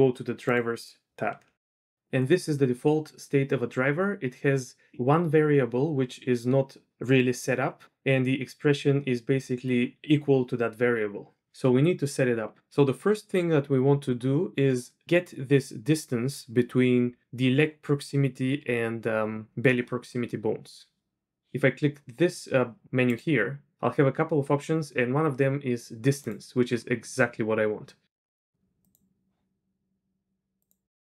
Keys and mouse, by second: 23.2-26.4 drag.